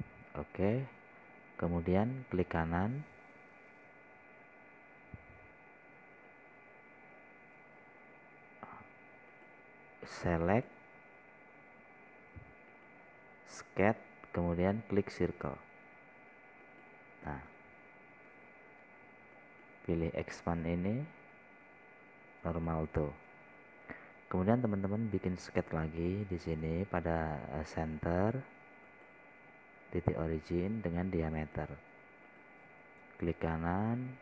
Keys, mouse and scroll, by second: 3.0 right click, 10.8 click, 14.2 right click, 18.1 click, 25.6 scroll up 1, 30.3 click, 33.7 right click.